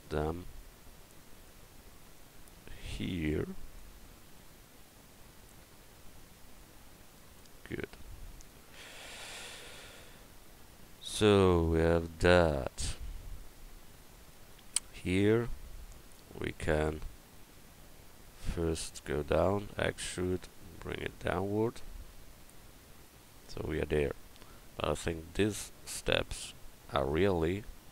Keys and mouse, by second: 9.1 a, 14.7 Tab, 19.6 e.